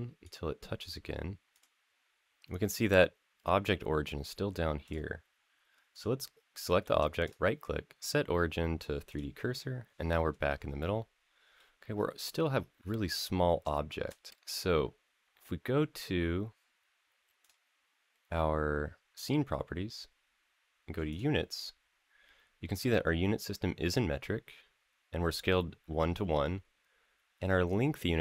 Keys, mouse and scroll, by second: 1.3 click, 3.4-4.0 drag, 4.6 click, 5.7 click, 6.1 scroll down 2, 6.5 shift+middle drag, 7.0-8.9 right drag, 9.3 click, 9.7 scroll up 2, 10.1 scroll down 2, 10.6-11.3 middle drag, 11.4-12.3 scroll down 6, 12.3-13.4 scroll up 6, 13.5 shift+middle drag, 13.9 scroll down 2, 14.2 scroll up 3, 14.3 click, 17.2 click, 18.9 click, 20.9 click.